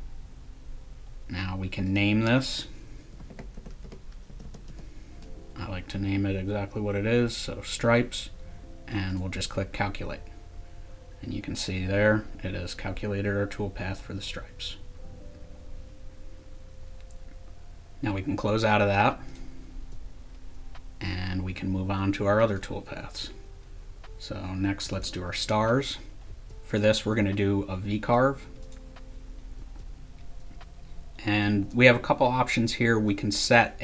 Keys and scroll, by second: 2.9-5.2 typing.